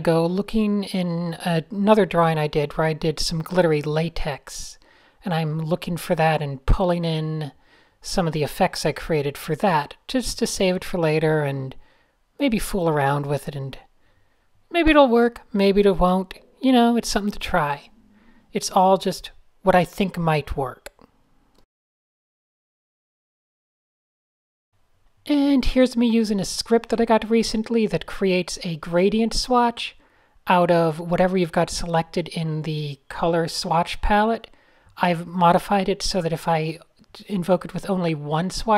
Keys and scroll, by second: 9.1-14.4 typing, 14.0 super+space, 14.7 super+0, 16.6 Tab, 18.4 Tab, 21.3-24.7 typing, 25.6 fn+F11, 27.0-29.2 typing, 29.3 Return, 30.5 alt+shift+super+g, 31.6-34.2 typing, 32.0 alt+super+g, 38.2 shift+9.